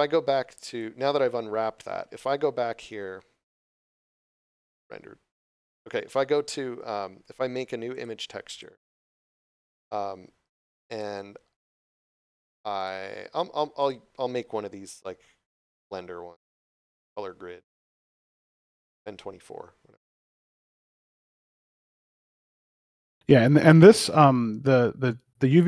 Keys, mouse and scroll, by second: 0.7 click, 4.2 click, 7.9 click, 10.8 click, 20.4 click, 22.2 shift+g, 22.2 r, 23.9 click.